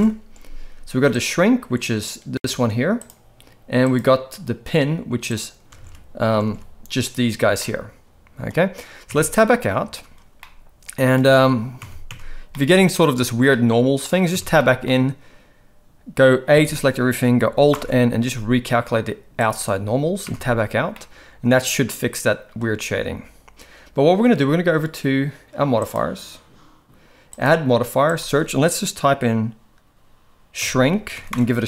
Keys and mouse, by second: 3.8-5.4 drag, 5.8 alt+a, 6.4 alt+a, 7.0 click, 7.5-8.4 middle drag, 9.1 Tab, 9.8 ctrl+s, 10.3-11.0 middle drag, 11.3 shift+middle drag, 11.7 Tab, 12.0 Tab, 12.5-12.9 middle drag, 13.5-14.0 middle drag, 14.3 Tab, 14.5 middle click, 16.5 a, 17.7 alt+n, 20.2 Tab, 20.9-22.5 middle drag, 25.8 click, 27.3-31.6 drag.